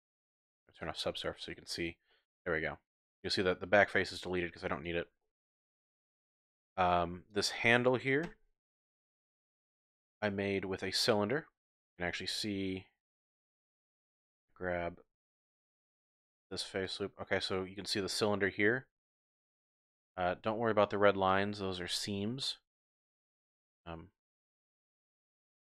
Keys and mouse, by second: 0.1 Tab, 0.8 click, 1.3 click, 1.7 click, 2.1-3.2 drag, 3.1 typing, 4.7 click, 5.2 click, 5.6 Tab, 9.0 KP_Divide, 9.8 Tab, 10.1 click, 11.3 click, 14.2 3, 16.8 alt+shift+click, 18.6-19.8 drag, 21.3-25.6 drag.